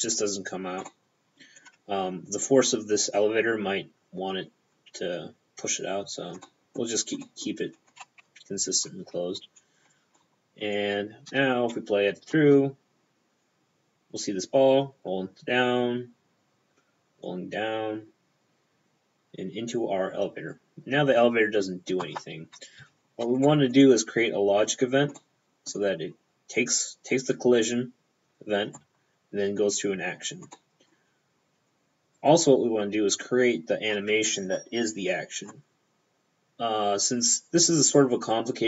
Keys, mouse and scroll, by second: 0.9 middle click, 1.6-2.5 scroll down 2, 6.5 middle click, 7.0-7.3 scroll up 1, 7.9 scroll up 3, 8.3 Tab, 9.6-10.1 scroll down 3, 10.2 middle click, 12.4 p, 23.5 middle click, 25.2 middle click, 25.7 p, 25.9-28.3 scroll down 1, 30.6 middle click, 30.8 p, 32.2 right click.